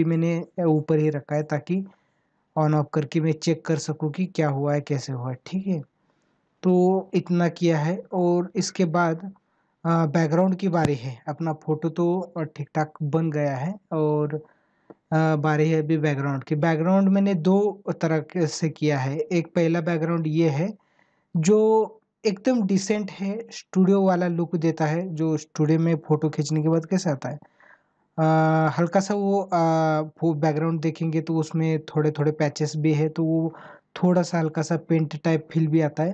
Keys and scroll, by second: 9.2 ctrl+=, 31.4 ctrl+=, 33.1 ctrl+=.